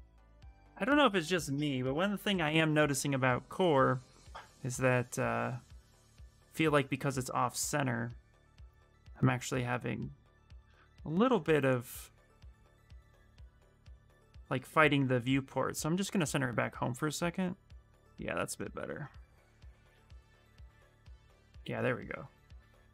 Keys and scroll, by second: 6.0 f, 6.3 f, 7.3 w, 13.0 q.